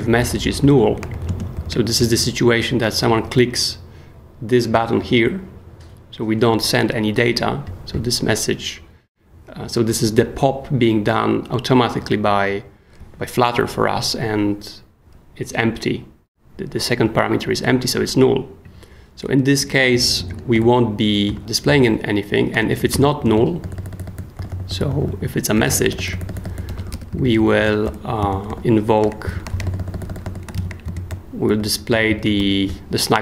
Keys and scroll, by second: 0.0-2.0 typing, 2.8 Return, 20.3 super+Escape, 20.5-23.3 typing, 23.6 super+j, 24.3-27.8 typing, 28.5 super+j, 29.0-31.9 typing, 31.1 shift+super+j, 32.4 super+s.